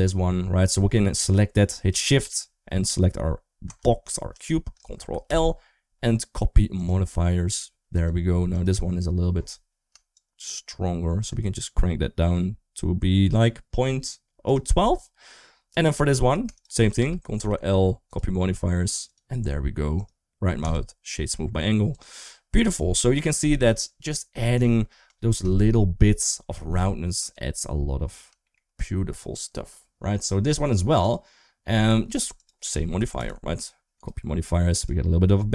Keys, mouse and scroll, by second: 5.1 ctrl+l, 7.8 click, 8.4 click, 10.0-14.4 shift+drag, 15.5 click, 16.4 shift+click, 17.3 ctrl+l, 19.0 click, 20.3 right click, 21.8 click, 28.3 shift+middle click, 30.9 click, 33.0 ctrl+l, 34.7 drag.